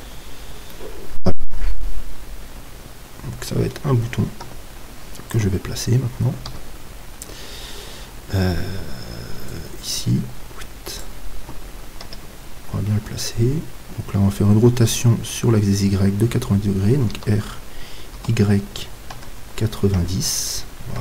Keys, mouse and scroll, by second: 0.7-1.8 middle drag, 2.3 middle click, 4.5 KP_7, 6.5 z, 7.9-9.5 middle drag, 9.5-12.1 drag, 12.1 KP_3, 17.1 r.